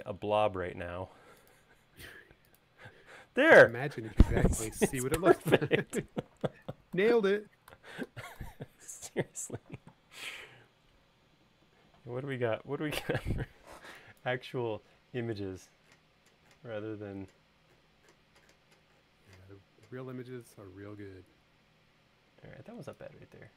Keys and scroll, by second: 7.1 super+z.